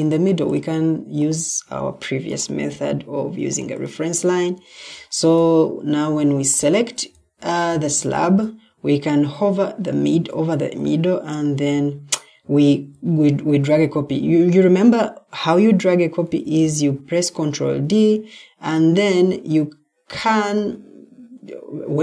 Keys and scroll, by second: 4.6 Escape, 7.1 Escape, 10.0 ctrl+d, 12.6 Escape, 16.5 ctrl+d.